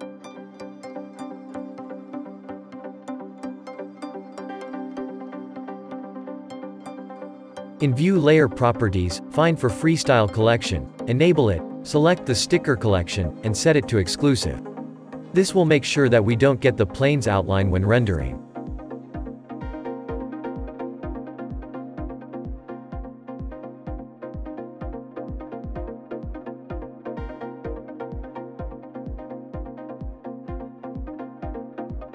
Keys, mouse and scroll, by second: 0.9 click, 2.1 click, 2.8 click, 3.6 click, 4.4 click, 16.8-27.5 drag, 28.4 scroll down 4, 29.5 click, 30.4-32.1 shift+middle drag.